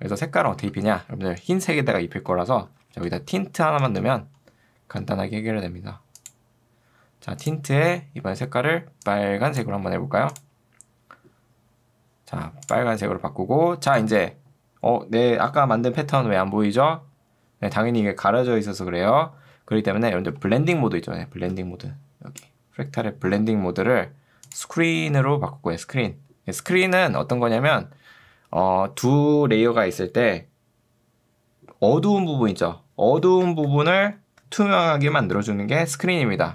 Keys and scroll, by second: 0.6 ctrl+space, 1.0-3.9 typing, 4.0 Return, 23.8 Escape.